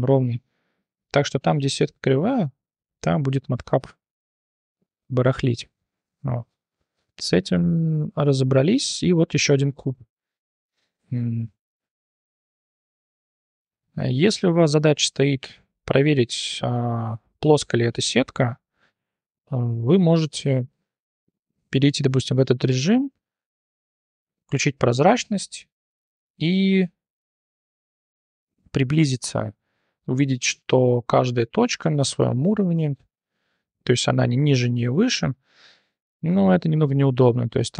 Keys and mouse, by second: 1.4-3.0 middle drag, 4.4-5.3 drag, 5.5 drag, 6.2 shift+drag, 8.0 /, 9.4 shift+drag, 9.8 click, 11.0 /, 11.7 Tab, 12.2 shift+drag, 12.5 Tab, 12.8 click, 13.0 click, 13.5 click, 14.4 shift+drag, 14.9 Tab, 15.4 3, 15.6 click, 20.2 1, 20.6 click, 21.2-21.6 drag, 21.8 `, 23.1 1, 23.8 t, 29.4-29.8 shift+drag, 30.8 click, 31.6 g, 33.2 click, 37.1 shift+drag.